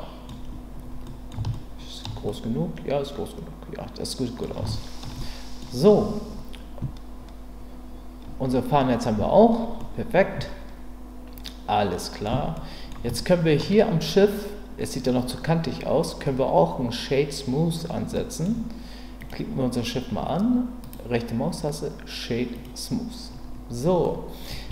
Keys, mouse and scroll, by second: 1.0-2.0 scroll up 2, 1.2 middle click, 2.0 shift+middle click, 2.3-4.4 middle drag, 4.7 shift+middle click, 5.2 middle click, 9.1 Tab, 9.8-12.2 middle drag, 12.5-12.9 middle drag, 13.2-13.6 shift+middle drag, 18.1 middle click, 19.2 click, 24.0-24.4 middle drag.